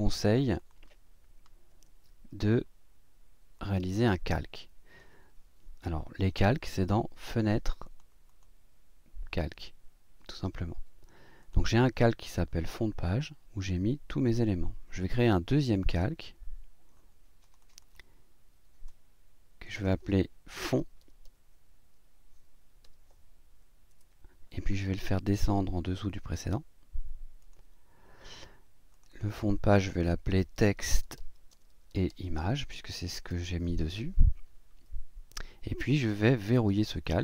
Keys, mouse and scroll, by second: 0.5 click, 3.5 click, 4.3-5.2 drag, 7.3 click, 7.8 click, 8.3 click, 11.4 click, 15.7 click, 17.4 click, 18.8 click, 20.5-21.7 typing, 22.8 d, 23.9 Return, 27.4 click, 28.9 click, 30.3-34.1 typing, 36.7 click.